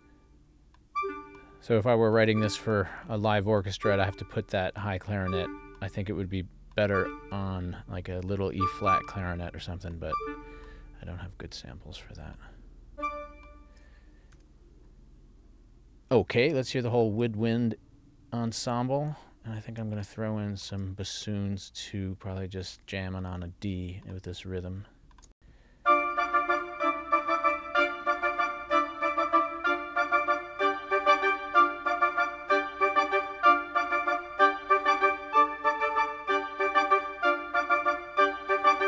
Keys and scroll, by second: 25.4 space.